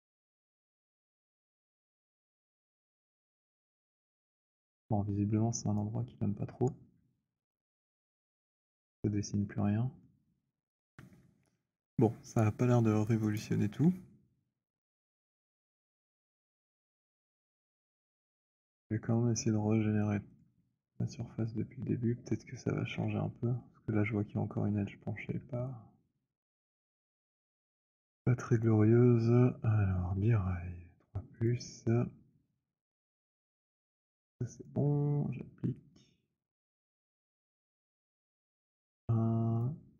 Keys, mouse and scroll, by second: 0.2 click, 3.9 alt+middle click, 4.3-5.5 scroll, 5.7 click, 8.0 click, 9.5-10.7 c, 13.3 click, 17.5 click, 18.5 w, 19.7 right click, 20.3 right click, 20.9 click, 22.8 Delete, 25.0 alt+middle click, 26.5 alt+middle click, 26.5 alt+click, 28.7 click, 31.4 click, 37.1 click, 37.9 alt+click, 39.6 click.